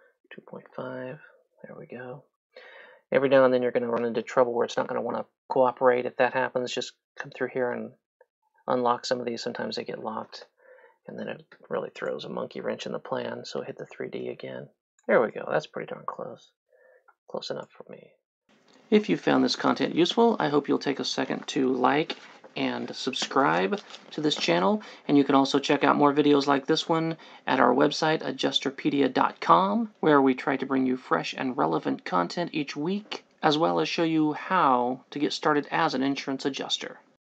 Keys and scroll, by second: 0.2 KP_2, 0.4 KP_Decimal, 0.6 KP_5, 1.1 Return, 14.2 3.